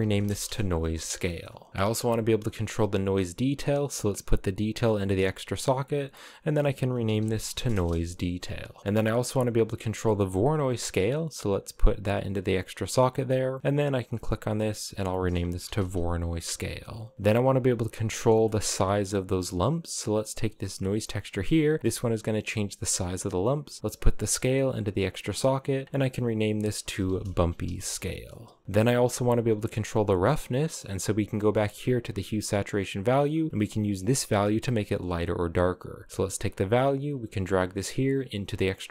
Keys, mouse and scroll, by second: 0.9-1.7 middle drag, 1.9-2.2 scroll up 2, 2.8-3.7 scroll down 1, 3.7 click, 5.4-8.5 drag, 8.5-9.8 middle drag, 9.8 click, 10.6 click, 13.6 click, 15.0-16.8 drag, 18.1-19.5 shift+middle drag, 19.5-22.7 drag, 23.7 click, 25.4 click, 25.5-28.2 drag, 28.2 BackSpace, 28.4 BackSpace, 28.6 middle click, 29.3-29.7 scroll down 4, 29.7 middle click, 30.6-31.0 scroll up 5, 31.0-32.0 middle drag, 32.0 click, 32.1-33.0 scroll up 3, 33.0-34.7 drag, 35.9 click, 38.4 click.